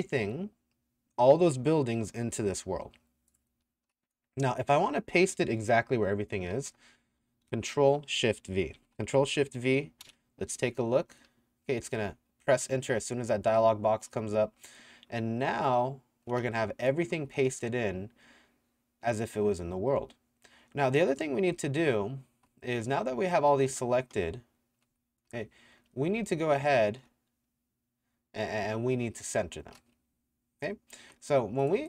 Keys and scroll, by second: 3.3-4.1 typing, 6.3-7.1 typing, 8.8 ctrl+shift+v, 10.1 KP_Enter, 11.3 s, 12.1 d, 14.3 w, 15.6 d, 16.4 s, 21.5 d, 23.1 w, 23.5 a, 24.3 s, 24.9 d, 26.2 d, 31.0 6.